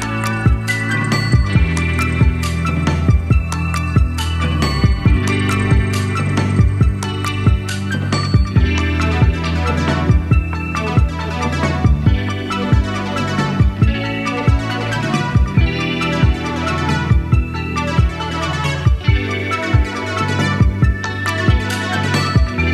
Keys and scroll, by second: 22.0 Right, 22.2 Right.